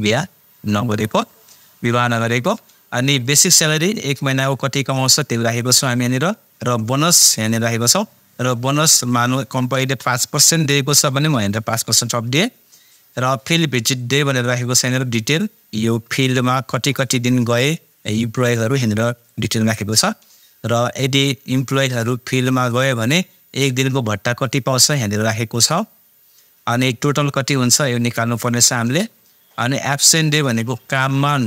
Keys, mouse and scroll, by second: 3.2-8.5 drag, 9.8 space, 10.9 shift+5, 14.0-16.7 drag, 22.7-27.5 drag, 27.5-31.4 drag.